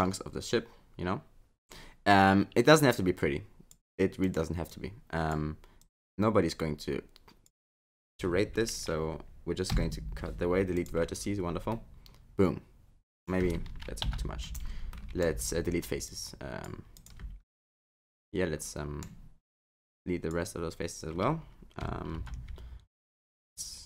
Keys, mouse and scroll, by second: 0.0 click, 0.0 scroll up 5, 1.7 click, 4.2 click, 4.7 click, 5.8 click, 9.7 Delete, 11.7 middle click, 14.1 ctrl+z, 14.8 scroll up 1, 15.0 middle click, 15.4 x, 17.6 middle click, 19.6 click, 22.1 alt+z, 22.9 click.